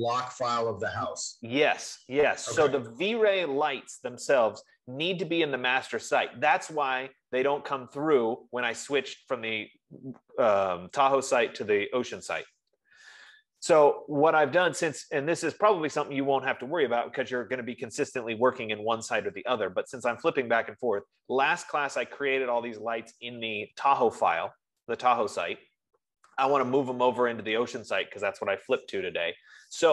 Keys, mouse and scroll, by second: 23.9 F15.